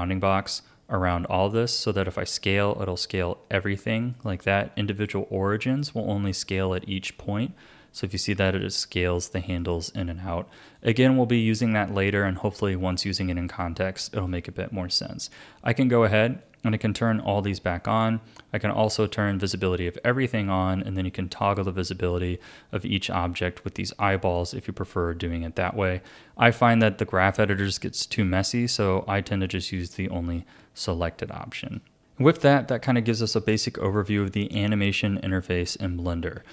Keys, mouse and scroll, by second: 1.9 s, 5.0-7.1 drag, 7.1 s, 10.7-12.0 drag, 12.0 a, 12.4-16.4 shift+middle drag, 16.4-19.3 drag, 21.4 click, 22.1 click, 23.6 click, 24.4 click, 29.8 click, 31.3 shift+middle click, 32.7-35.6 shift+middle drag, 35.6 Tab.